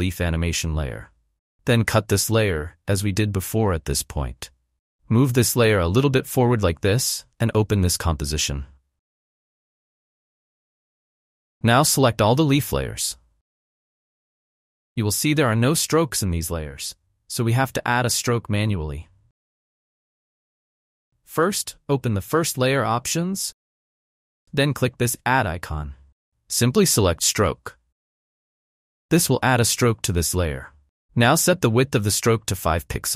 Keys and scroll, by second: 3.6 alt+[.